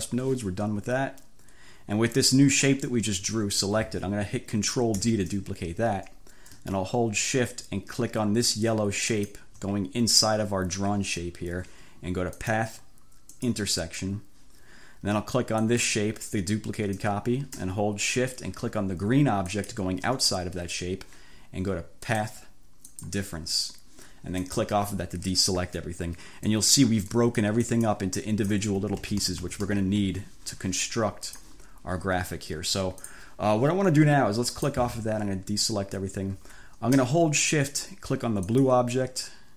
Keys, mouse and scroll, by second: 5.0 ctrl+d, 9.1 shift+click, 12.5 click, 13.4 click, 15.7 click, 19.6 shift+click, 22.2 click, 23.0 click, 24.6 click, 26.6 click, 27.2 click, 28.3 click, 29.2 ctrl+z, 31.4 click, 33.1 click, 34.6 click, 38.5 shift+click.